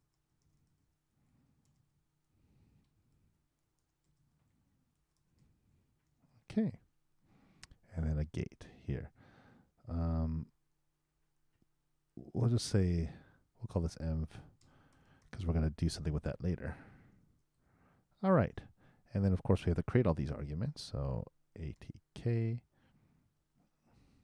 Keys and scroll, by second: 0.1-2.1 typing, 4.2-6.0 typing, 16.3 shift+e, 17.5 shift+;.